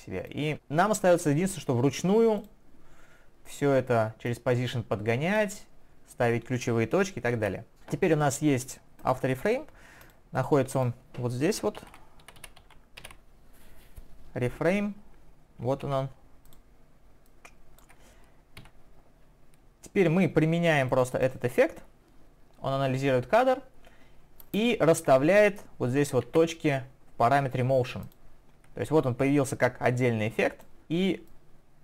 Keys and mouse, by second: 1.1 click, 2.4 click, 4.3 click, 7.4 ctrl+я, 9.0 click, 10.0 click, 10.8 click, 10.9 double click, 22.4 double click, 26.2 ctrl+1, 28.0 ctrl+click, 29.5 ctrl+click.